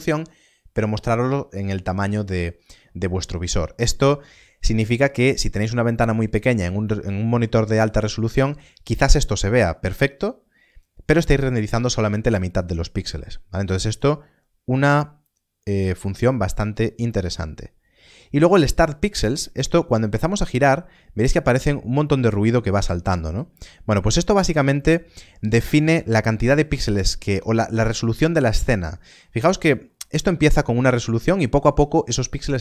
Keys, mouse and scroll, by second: 13.8 click, 16.4 click, 19.7 middle click, 29.8 middle click.